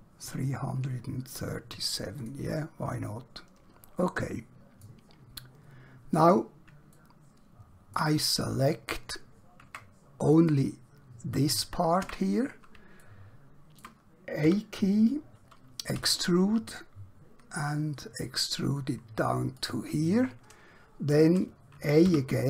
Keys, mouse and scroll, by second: 2.2 click, 2.9 middle click, 5.7-6.2 scroll down 1, 6.2-6.7 scroll up 1, 7.0 shift+middle click, 9.7 Tab, 10.3 click, 12.0 Tab, 13.1 shift+middle click, 14.6 a, 16.1 e, 19.6 click, 22.2 a.